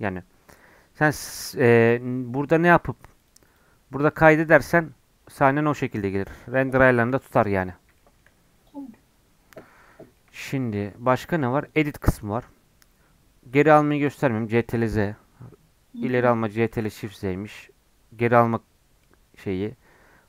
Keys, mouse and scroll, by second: 1.3-5.8 drag, 5.8 middle click, 6.7 KP_1, 7.0 KP_1, 7.3-7.9 scroll up 3, 7.9-9.9 shift+middle drag, 9.9 scroll down 4, 10.1-11.6 middle drag, 11.6-20.2 drag.